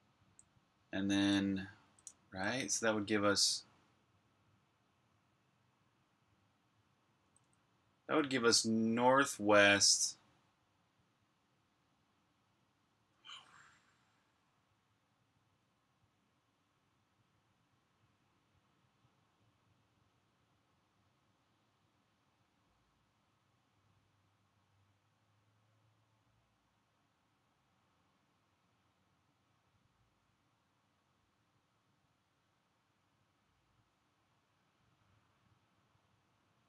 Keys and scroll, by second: 0.0-2.7 typing, 4.4 typing, 7.1 typing.